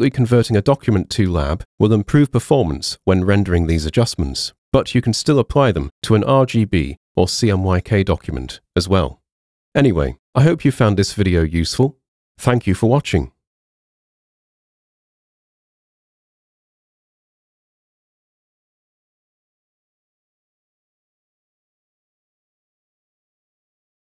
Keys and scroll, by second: 0.0-0.7 typing.